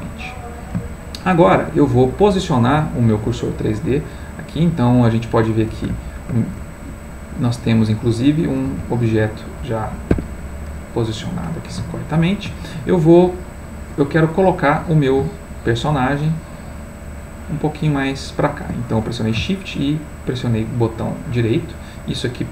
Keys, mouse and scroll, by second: 5.2 click, 10.4 Escape, 10.8-15.2 middle drag, 21.0 shift+right click, 21.6 shift+right click, 22.2 shift+right click.